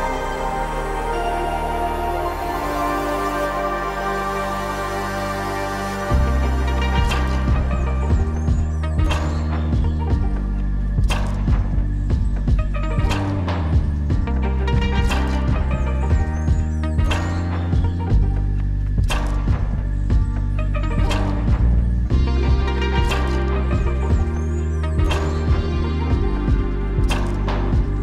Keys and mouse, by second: 6.5 middle click, 7.8 KP_5, 8.0 KP_5, 8.8 middle click, 8.9 middle click, 13.7 shift+middle click, 14.0 middle click, 18.3 click, 18.8 click, 21.7 shift+click, 25.1 click, 25.3 click, 25.9 click, 26.1 click.